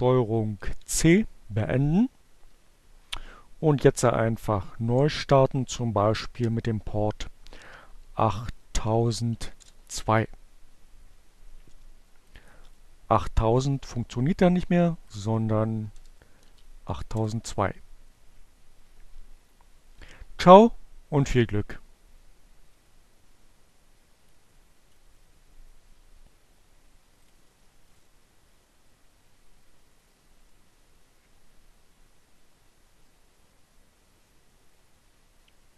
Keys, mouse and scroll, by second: 0.4 space, 2.6-3.4 typing, 5.0 2, 5.2 Return, 10.1-12.1 drag, 12.9 click, 14.5 click, 15.3 BackSpace, 16.3 2, 17.3 Return, 23.7 click, 26.1 click.